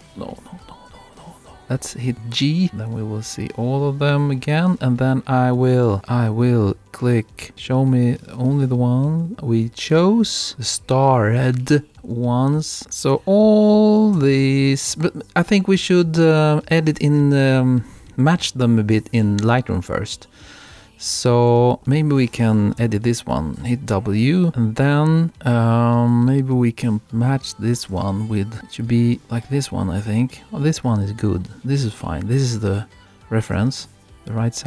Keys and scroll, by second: 21.5 Right, 21.7 Left, 28.5 Right, 33.5 Left.